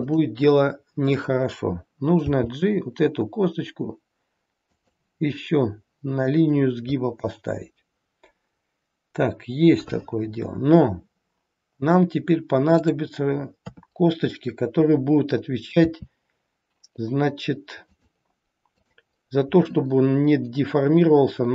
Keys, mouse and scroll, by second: 2.3 g, 13.6 KP_3, 15.8 e.